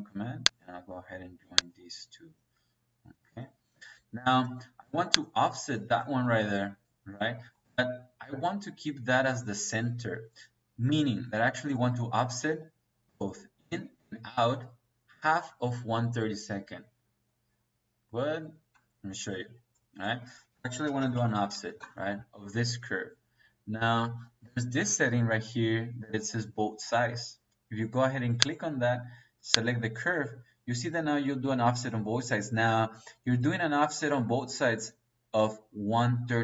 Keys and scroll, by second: 3.3 Escape, 10.0 Escape, 20.0 Escape, 21.0 f, 21.7 Return.